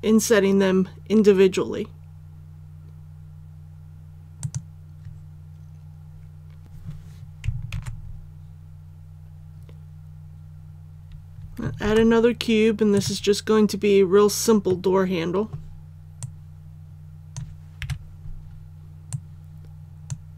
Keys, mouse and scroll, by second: 4.4 click, 7.7 alt+a, 10.2-10.6 scroll down 1, 11.8 shift+a, 12.9 click, 14.6 middle click, 16.2-17.8 drag, 17.8 KP_3, 19.1-20.2 drag.